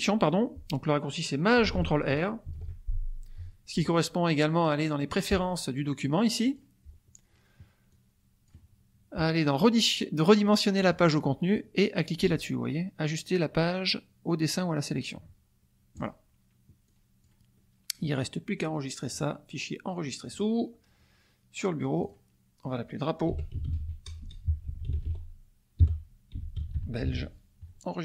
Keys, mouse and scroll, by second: 2.5 ctrl+shift+r, 6.4 click, 7.9 click, 10.8 click, 15.9 click, 16.8-17.4 drag, 17.5 click, 19.1 click, 20.4-21.0 drag, 22.0 click, 23.1-27.6 typing.